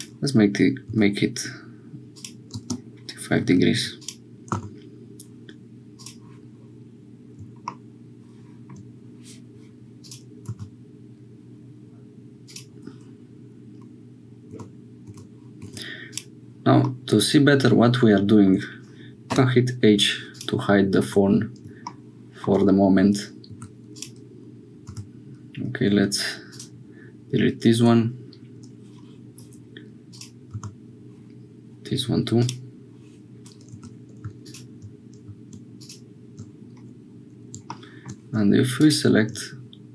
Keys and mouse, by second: 3.4 2, 4.5 x, 10.4 x, 14.5 Tab, 15.0 Tab, 15.6 Tab, 16.8-18.5 middle drag, 19.3 h, 20.3 click, 21.0 Tab, 23.5 2, 24.8 x, 30.1 click, 30.5 x, 33.7 2.